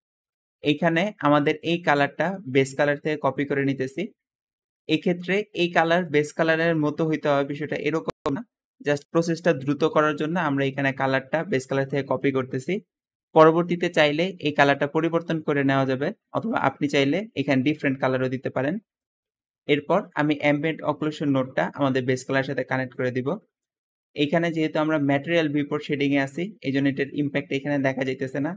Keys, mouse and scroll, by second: 6.1 click, 6.7 click, 19.9 Escape, 21.4-22.7 drag, 21.8 Escape.